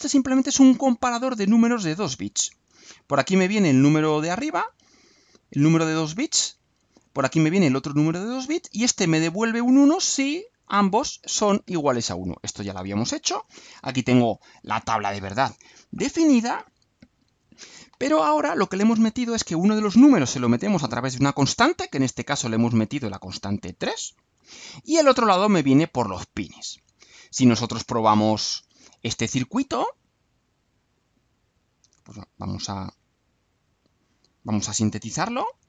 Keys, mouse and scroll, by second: 27.3-28.5 right drag, 29.6 click, 30.9 click, 31.9 click, 32.4 scroll down 1, 32.8-34.2 right drag, 34.4 click, 35.3 ctrl+u.